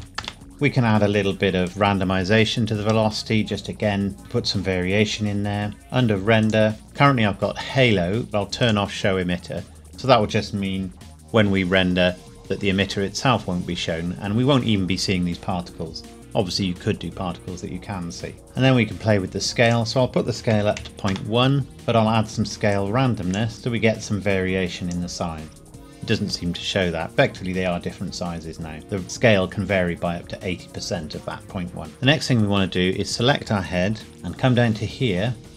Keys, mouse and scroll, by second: 0.2 KP_Enter, 1.7 click, 5.7-6.4 scroll down 1, 6.4 click, 8.6 click, 19.6 click, 20.5 KP_Decimal, 20.8 KP_1, 21.1 KP_Enter, 22.7 click, 25.7 middle click, 31.9 click.